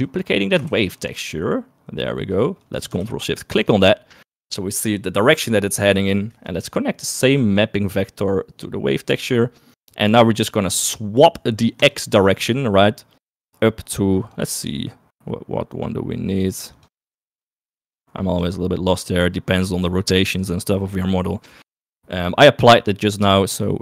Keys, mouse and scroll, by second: 0.4 click, 1.0 shift+d, 3.6 ctrl+shift+click, 7.3-9.5 drag, 12.0-14.5 drag, 15.9-16.9 drag, 17.0 click, 17.7 click.